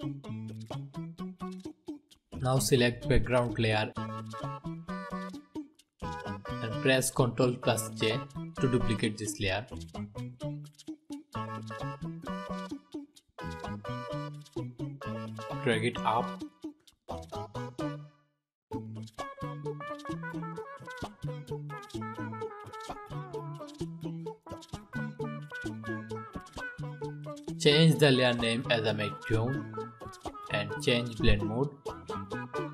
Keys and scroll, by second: 8.0 ctrl+j.